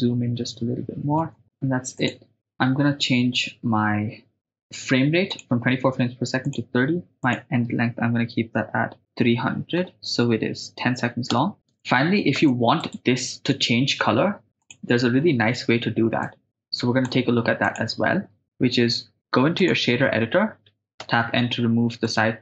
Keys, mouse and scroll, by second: 1.3 ctrl+middle click, 2.0 click, 4.4 click, 5.3-6.8 drag, 7.2-11.4 drag, 9.1-12.4 typing, 12.9 right click, 14.6 click, 16.2 click, 17.6 click, 21.0 n, 22.1 ctrl+middle click.